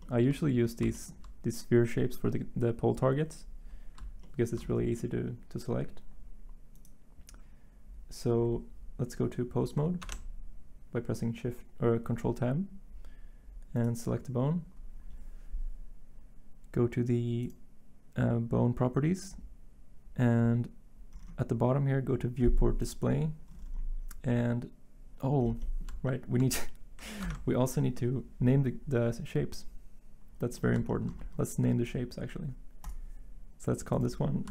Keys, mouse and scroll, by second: 10.0 ctrl+Tab, 27.2 ctrl+Tab.